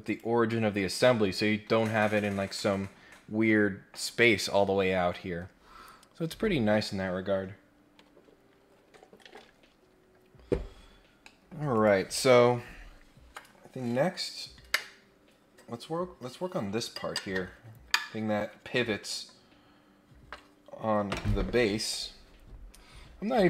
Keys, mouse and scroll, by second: 0.0 click, 11.2 middle click, 11.7 click.